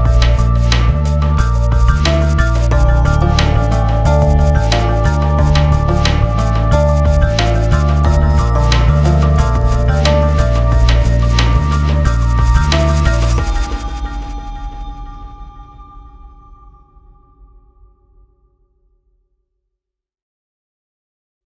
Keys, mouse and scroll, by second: 0.1 ctrl+s, 0.6 click, 1.9 click, 2.8 s, 3.1 click, 5.0 click, 5.7 click, 6.0 F4, 7.5 click, 10.4 g, 11.0-12.5 drag, 12.5 click, 13.3 F4, 13.7 F9.